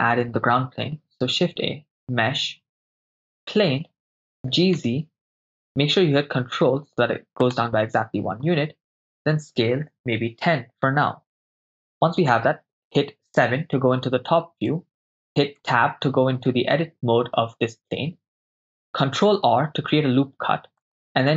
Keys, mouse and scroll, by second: 0.9 shift+a, 4.5 g, 4.7 z, 7.5-9.5 ctrl+drag, 9.5 s, 9.9 1, 10.0 0, 11.5 Return, 13.3 KP_7, 14.7-15.2 ctrl+middle drag, 15.8 Tab, 19.3 ctrl+r.